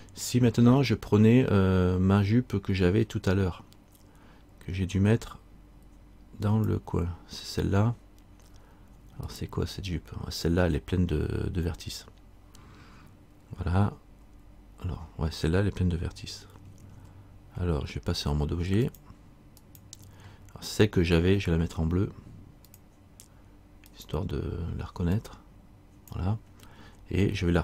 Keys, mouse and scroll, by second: 6.6 click, 7.9-8.6 scroll up 1, 9.4 right click, 9.4-9.9 scroll up 3, 14.4 Tab, 19.0 click, 22.9 click.